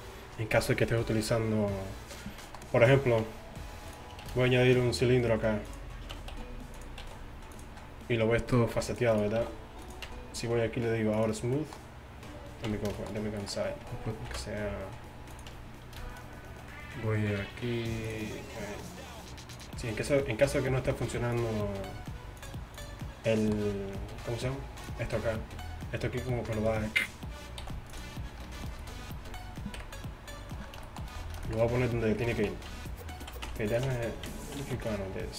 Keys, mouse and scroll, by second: 3.3 Tab, 4.3 shift+a, 6.2 Tab, 6.4 s, 7.1 s, 8.8 ctrl+r, 9.5 s, 10.1 Tab, 12.7 Tab, 14.3 ctrl+b, 15.6 Tab, 17.4 t, 18.1-27.7 drag, 24.8 right click, 27.7 x, 28.9-30.7 right drag, 29.8 KP_1, 32.8 Tab, 33.5 Tab, 33.9 Tab, 34.7 z.